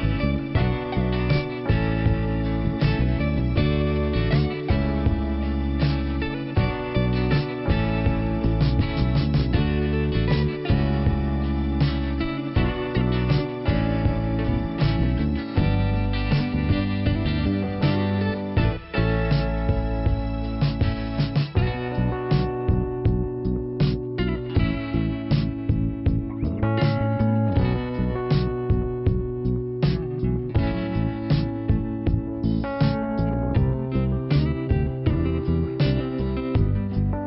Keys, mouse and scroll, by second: 0.2 scroll up 1, 1.9 click, 3.1 click, 6.8 click, 8.5 click, 8.6 click, 9.6 click, 10.7 click, 10.8 click, 11.7 click, 14.0 click, 14.1 click, 14.6 scroll down 2, 15.9 p, 18.3 scroll up 2, 18.5 click, 18.7 click, 19.3 scroll down 1, 21.2 click, 23.3 click, 23.9-24.2 scroll down 1, 25.2 middle click, 26.7 click, 27.9 click, 28.9 click, 30.0 click, 31.6 click, 35.3 middle click, 36.6 click.